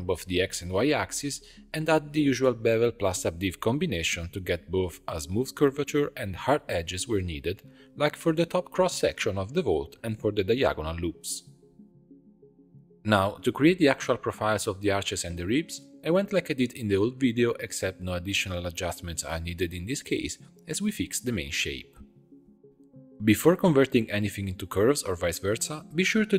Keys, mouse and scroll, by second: 1.9 middle click, 2.1-7.8 drag, 9.3 alt+shift+click, 11.1 click, 11.9 click, 12.6 scroll down 4, 12.7-15.7 middle drag, 15.9 alt+\, 16.4 click, 16.7 Tab, 17.1 2, 17.8 alt+click, 18.9 alt+shift+click, 20.1 alt+shift+click, 20.9 shift+d, 22.1 p, 23.0 Tab, 23.2 click, 23.9 click, 24.2 h, 24.8-25.8 middle drag, 25.8-26.2 scroll down 3, 26.2-26.3 middle drag.